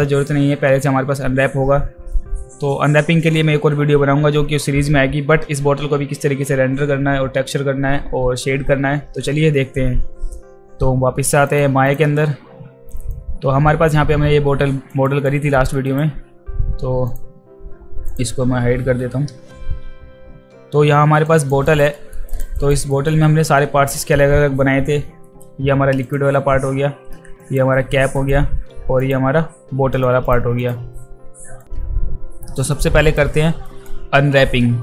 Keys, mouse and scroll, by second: 11.5 click, 11.8 click, 13.1-14.9 alt+drag, 15.0 alt+right click, 15.5 alt+middle click, 15.9 alt+right click, 18.1 click, 21.3 alt+click, 21.6 alt+right click, 21.9 alt+middle click, 22.3 alt+right click, 22.6 alt+right click, 22.9 alt+middle click, 23.9 click, 27.4 drag, 28.2 click, 29.0 click, 29.9 click, 30.6 click, 32.7-33.1 alt+drag, 33.7 alt+right click.